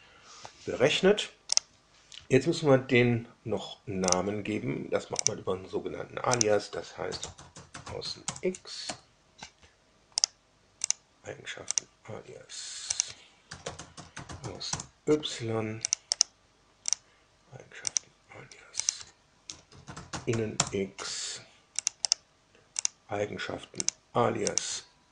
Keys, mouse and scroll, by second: 1.5 click, 4.0 click, 5.1 click, 6.3 click, 6.8-8.4 typing, 8.8 Down, 10.1 right click, 10.8 click, 11.7 drag, 12.9 click, 13.2-14.9 typing, 15.8 click, 16.0 right click, 16.9 click, 17.9 drag, 18.8 click, 19.1-20.7 typing, 21.7 click, 22.0 right click, 22.7 click, 23.8 click, 24.5 click, 24.9-25.1 typing.